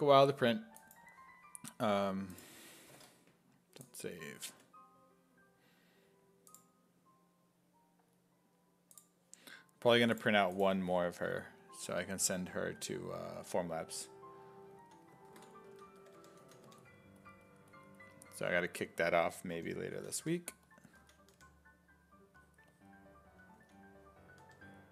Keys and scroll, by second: 12.8 s, 14.0-17.2 typing, 15.3 ctrl+z, 19.0-21.4 typing, 23.6 s, 24.4 1.